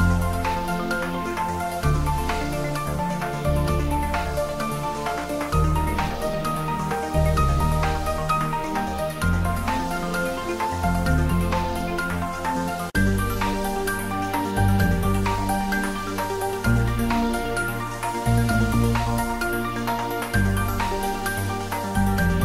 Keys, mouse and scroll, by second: 0.1 click, 0.5 ctrl+middle click, 1.0 shift+middle click, 1.8 ctrl+middle click, 2.5 Tab, 3.1-5.3 middle drag, 5.3 click, 6.0 ctrl+middle click, 6.3 Tab, 7.1 g, 7.4 y, 8.3 BackSpace, 10.0 click, 10.3 Tab, 10.6 ctrl+middle click, 10.9 middle click, 11.2 shift+z, 11.8-13.1 middle drag, 13.1 x, 13.2 click, 14.3 shift+a, 15.2 click, 16.0 g, 16.5 click, 16.8 s, 17.3 click, 17.6 g, 18.4 click, 18.8 Tab, 19.2 shift+z, 19.9 click, 20.6 g, 22.3-22.4 drag.